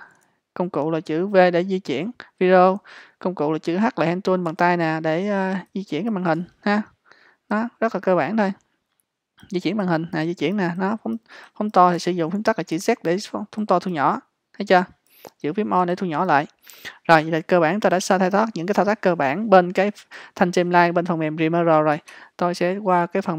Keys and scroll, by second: 4.5 h, 12.8 z.